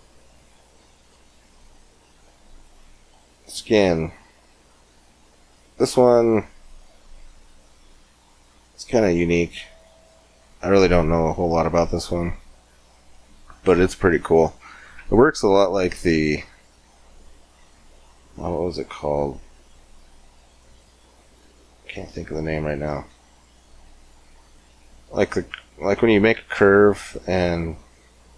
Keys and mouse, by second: 18.3-20.3 drag.